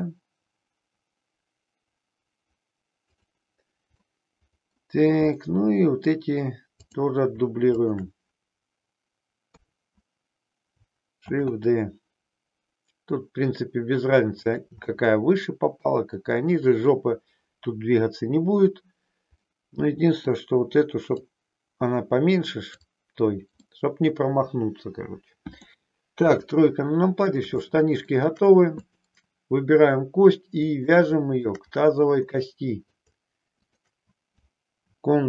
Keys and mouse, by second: 3.0 click, 4.0 middle click, 5.4 middle click, 6.8 click, 7.8 shift+click, 9.4 KP_3, 11.3 shift+d, 14.4 click, 14.8-15.8 middle drag, 19.4 middle click, 21.3-22.7 drag, 23.5-25.8 middle drag, 26.1 KP_3, 27.7 shift+middle click, 28.7 click, 30.9 shift+middle click, 32.4 middle click.